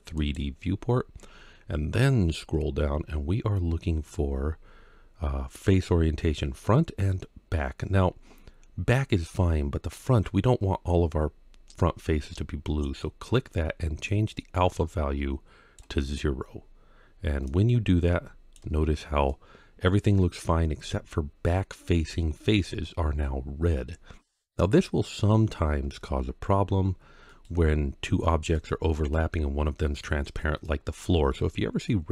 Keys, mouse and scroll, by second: 19.1-20.6 middle drag, 28.4-29.0 middle drag, 30.4-31.2 middle drag.